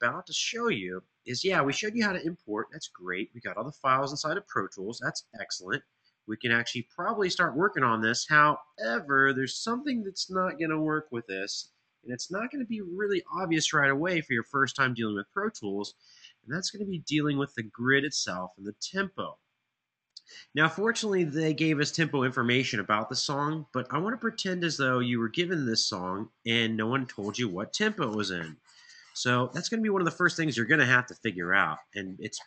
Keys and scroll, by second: 11.3 ctrl+alt+Page_Down.